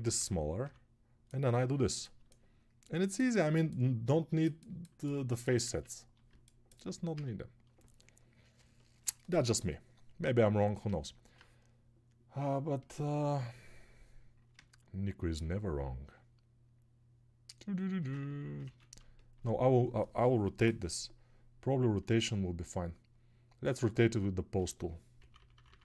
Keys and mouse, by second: 6.2 ctrl+z, 18.1 ctrl+space, 18.7 ctrl+z.